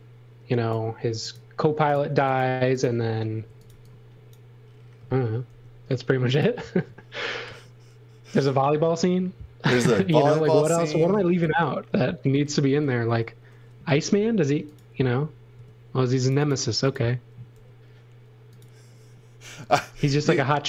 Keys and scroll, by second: 0.8 space, 3.2-4.2 typing, 5.4 m, 11.4 shift+4, 12.3 shift+4, 13.0 space, 13.9 m, 15.5 space, 17.5 m.